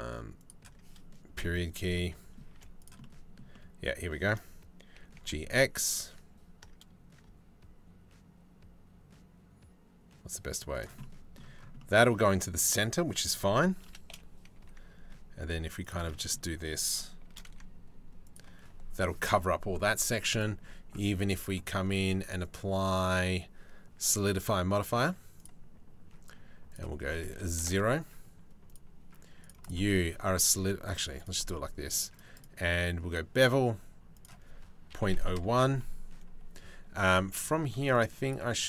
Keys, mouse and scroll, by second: 1.0 KP_Decimal, 2.2 z, 2.6-4.1 middle drag, 4.6 g, 10.6 middle click, 11.4-13.2 middle drag, 13.4 shift+d, 16.9 shift+d, 20.0 click, 22.0 click, 22.5-36.9 drag.